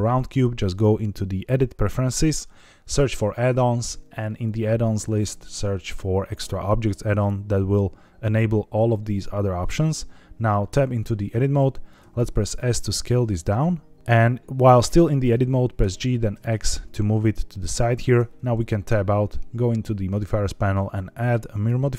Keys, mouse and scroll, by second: 11.0 Tab, 12.0 s, 14.0 click, 15.7 g, 16.3 x, 17.6 click, 18.0 Tab, 19.1 click, 20.2 click, 20.7 drag, 21.6 click.